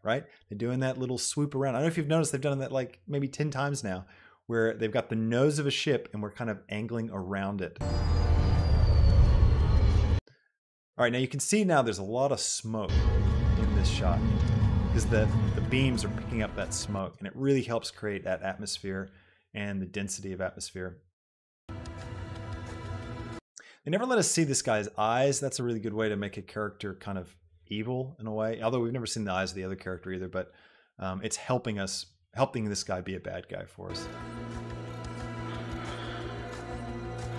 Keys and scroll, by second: 7.6 space, 10.2 space, 13.1 space, 17.2 space, 21.9 space, 34.0 space.